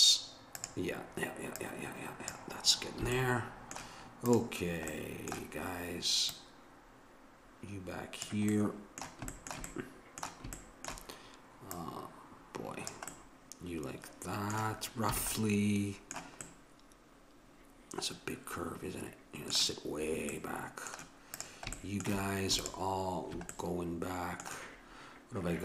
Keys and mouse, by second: 1.6-3.2 drag, 3.1 a, 4.3-6.0 drag, 6.3-8.1 drag, 8.6-11.7 middle drag, 11.7-13.6 drag, 13.6-14.8 middle drag, 15.2 a, 15.4 middle click, 20.3-21.4 middle drag, 21.4-24.3 drag, 24.3-25.6 middle drag.